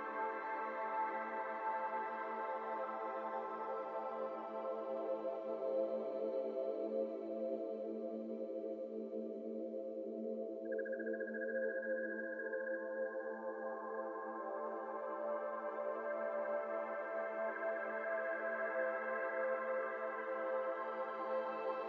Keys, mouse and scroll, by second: 0.4 c, 2.4 middle click, 2.9 alt+z, 3.0 middle click, 3.5 shift+click, 4.2 shift+click, 4.6 shift+click, 5.4 p, 6.0 Tab, 6.1 scroll down 1, 6.3 click, 6.6-7.3 middle drag, 7.3 ctrl+z, 7.9 Tab, 8.4 click, 8.7 middle click, 9.3 click, 10.1 KP_7, 10.4 1, 10.9 alt+z, 11.3 click, 11.8 shift+middle click, 12.0 scroll up 1, 12.2 middle click, 12.5 alt+z, 12.6 middle click, 13.1 click, 13.3 Tab, 13.5 click, 14.0 Tab, 14.4 middle click, 14.6 Tab, 15.1 alt+z, 15.4 middle drag, 15.7 Tab, 16.0 middle click, 16.9 KP_7, 17.2 KP_7, 18.2 click, 19.0 shift+click, 21.2 shift+click.